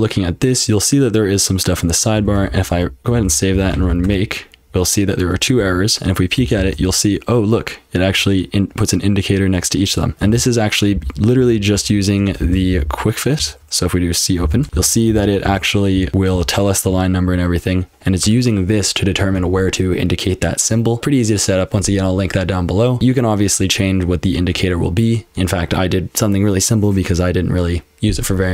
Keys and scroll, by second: 2.0-4.3 typing, 5.6 q, 6.4 j, 6.6 j, 10.3 :, 10.9 ctrl+p, 11.3 ctrl+p, 11.7 ctrl+p, 12.2-18.9 typing, 20.7-21.5 typing, 23.0 typing.